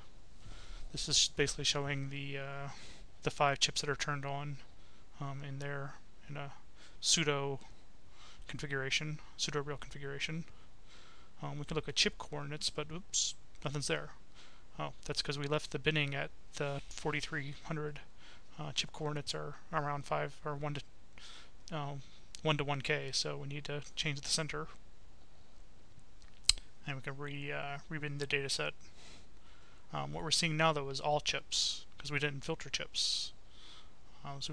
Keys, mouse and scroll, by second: 0.1 right click, 3.5-6.1 drag, 6.6 click, 8.0 click, 8.8 click, 9.9 click, 11.0 click, 12.3-13.9 drag, 14.8 click, 15.8-16.9 typing, 17.4 click, 18.0-19.2 typing, 19.6 click, 21.1 click, 22.3-23.8 drag, 25.8 click, 27.2 click, 28.0-30.7 right drag, 33.4-34.5 drag.